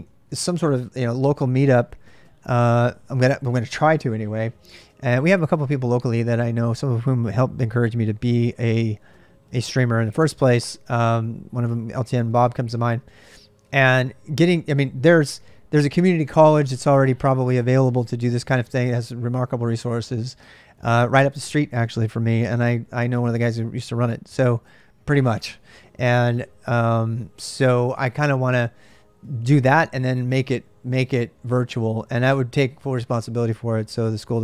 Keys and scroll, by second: 0.0-0.6 typing.